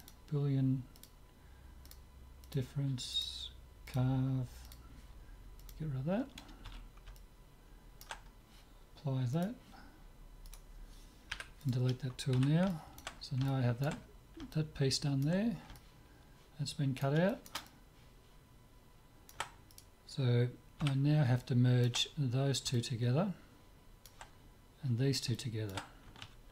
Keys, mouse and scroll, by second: 0.0-1.8 drag, 1.9-6.4 drag, 6.7 z, 7.2-9.0 middle drag, 9.3-11.1 drag, 10.5-12.5 right drag, 11.3 Delete, 12.5 z, 12.7-19.3 middle drag, 19.4 middle click, 19.7-21.8 right drag, 20.8 z, 21.4 click, 21.8-24.5 middle drag, 24.6 middle click, 25.3-26.5 middle drag.